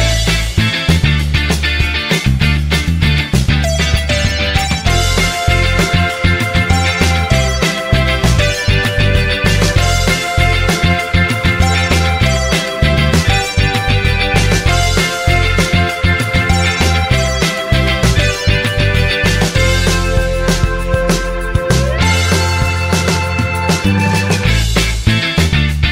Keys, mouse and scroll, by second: 0.3 click, 1.6-3.6 drag, 4.7 click, 6.7 ctrl+click, 8.1 ctrl+click, 9.7 click, 10.8 ctrl+click, 12.9 ctrl+click, 14.6 click, 15.4 ctrl+click, 16.8 ctrl+click, 18.3 click, 19.1 ctrl+click, 20.6 ctrl+click, 22.1 click, 23.0 ctrl+click.